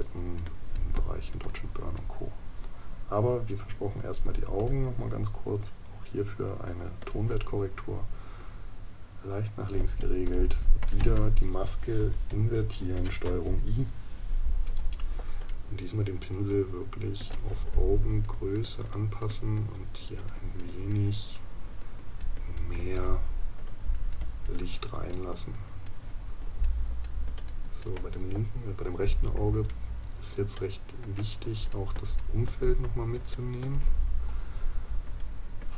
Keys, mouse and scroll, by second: 15.5 right click, 29.7 right click.